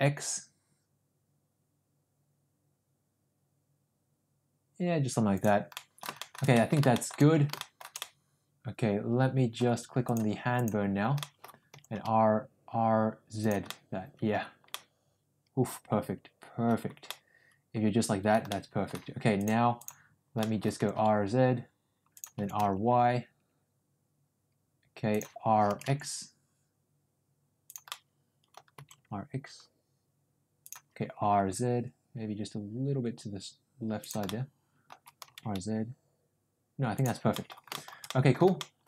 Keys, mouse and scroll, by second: 5.6 middle click, 6.1 shift+middle click, 6.4 middle click, 6.8 scroll up 1, 6.8 shift+middle click, 7.0 scroll down 1, 7.5-8.0 scroll up 2, 7.6 shift+middle click, 8.0-9.6 middle drag, 10.1 click, 11.1 middle click, 11.6 r, 13.6 middle click, 14.6-16.7 middle drag, 17.0-18.3 middle drag, 18.4 middle click, 19.4 click, 19.9 click, 20.3 middle click, 20.8 r, 22.3 r, 25.6 r, 27.9 scroll up 1, 27.9 middle click, 28.7 r, 31.1 r, 34.2 scroll up 1, 34.3 middle click, 35.1 r, 37.2 middle drag, 37.7 middle drag, 38.0 middle drag, 38.5 middle drag.